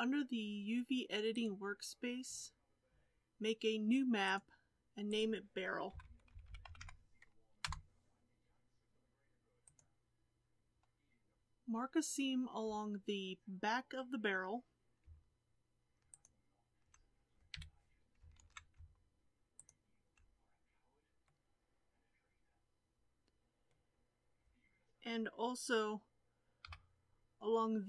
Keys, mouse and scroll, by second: 1.4-6.1 drag, 7.6 r, 11.3-16.2 shift+middle drag, 16.2 alt+click, 17.6 2, 18.4 alt+a, 19.7 alt+click, 21.2-26.6 middle drag, 26.6 KP_7.